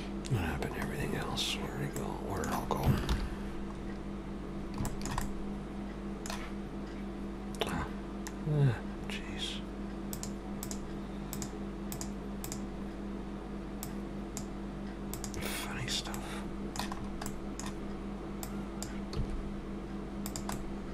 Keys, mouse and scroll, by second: 0.1 scroll up 2, 0.9 scroll down 1, 2.0 middle click, 2.0 scroll down 2, 3.0 alt+h, 3.7 scroll up 3, 4.4-4.9 scroll down 2, 4.9 shift+middle click, 5.2 middle click, 9.0 scroll up 2, 10.1 click, 10.1-10.6 scroll up 1, 10.6 click, 15.7-16.2 scroll down 2, 16.2 middle click, 17.0-17.5 scroll up 2, 17.3 middle click, 18.4 click, 19.2 s, 20.5 middle click.